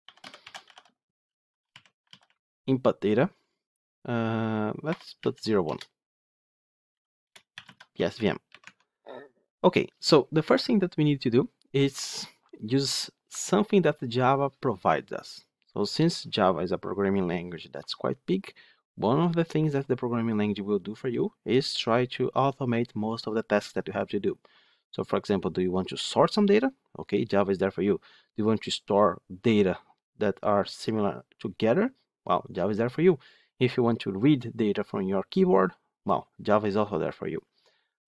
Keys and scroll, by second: 8.5 Tab.